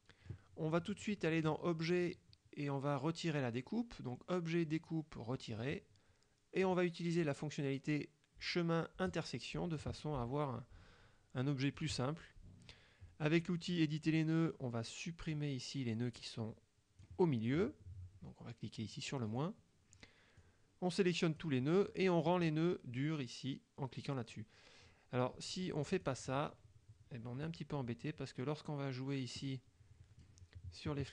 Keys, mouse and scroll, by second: 1.5 click, 5.6 click, 6.7 click, 9.2 click, 11.9 click, 15.4-17.3 drag, 19.3 click, 20.5-21.7 drag, 26.0 click, 27.7 click, 29.5 click.